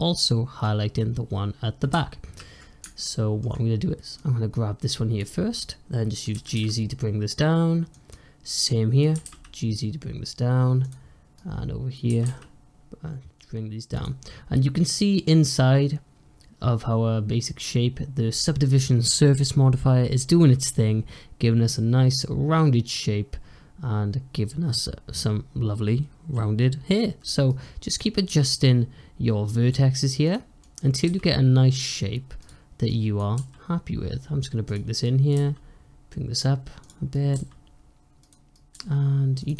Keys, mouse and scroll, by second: 2.9-4.0 shift+middle drag, 4.0 click, 6.2 g, 8.4 click, 9.0 g, 11.2 click, 12.0 g, 27.4 click, 28.2 g, 30.5 click, 30.9 g, 32.7 click, 33.2 g, 34.9 click, 35.2 g, 37.0 click, 37.2 g, 38.4 click, 38.6 g.